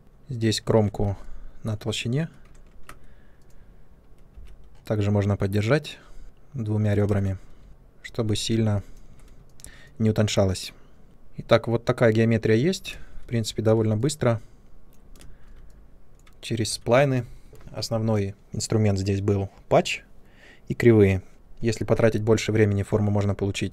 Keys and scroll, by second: 0.6 shift+Tab, 2.6 ctrl+1, 7.0 space, 7.6 shift+Tab, 11.1 ctrl+1, 12.9 ctrl+space, 15.1 ctrl+space.